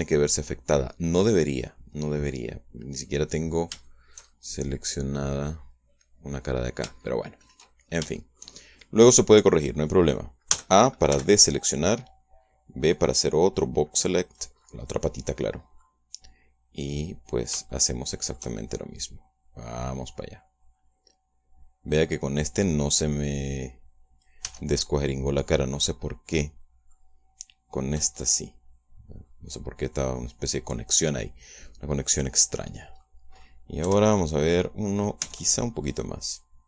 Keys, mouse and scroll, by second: 4.1-8.5 middle drag, 8.7 shift+scroll down 1, 9.0-10.4 shift+middle drag, 10.6 middle click, 11.3 a, 11.9 b, 13.7-15.4 drag, 15.5-16.8 middle drag, 17.7 middle click, 19.0 shift+middle click, 19.9-25.3 drag, 25.3 Tab, 25.9-26.3 scroll down 2, 26.3-27.9 middle drag, 29.1-33.6 middle drag, 33.9 middle click, 34.7 KP_1, 36.1 Tab.